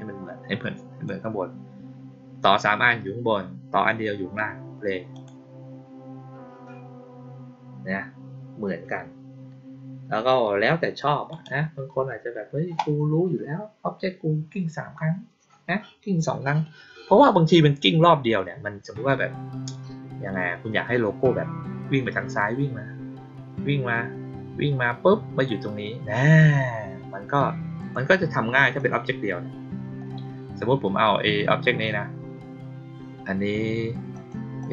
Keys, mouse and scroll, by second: 5.1 click, 11.2 click, 27.7 click, 28.7 click, 34.1 click, 34.5 click.